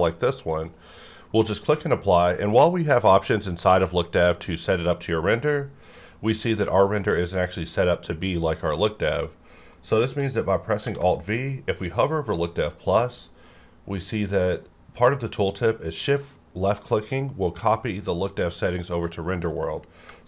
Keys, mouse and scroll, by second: 0.4 click, 5.8 click, 5.8 click, 9.7 middle click, 10.8 alt+v, 20.0 alt+v.